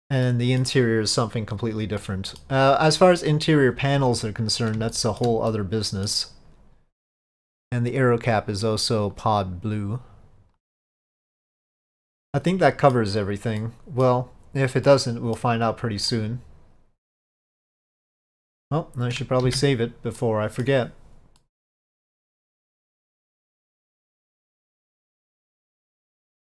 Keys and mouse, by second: 0.3-0.7 middle drag, 2.1-2.5 middle drag, 4.3-4.7 middle drag, 5.0 shift+middle drag, 5.6-6.1 middle drag, 8.6 click, 9.2-10.7 drag, 11.9 click, 12.4-13.0 middle drag, 13.7-14.1 middle drag, 15.0-15.5 middle drag, 16.2-18.5 middle drag, 19.5 ctrl+s, 20.3-20.7 middle drag, 21.5-26.5 middle drag.